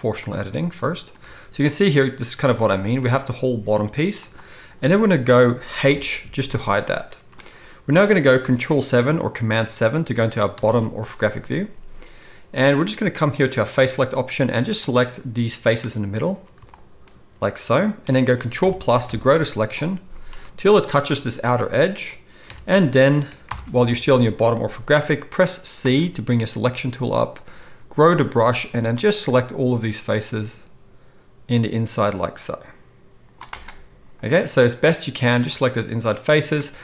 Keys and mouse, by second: 0.1-13.5 middle drag, 1.1 g, 3.0 g, 5.8 h, 10.5 ctrl+KP_7, 13.5-36.8 drag, 18.6 ctrl+KP_Add, 19.0 ctrl+KP_Add, 22.4 KP_7, 23.4 ctrl+KP_7, 25.8 c.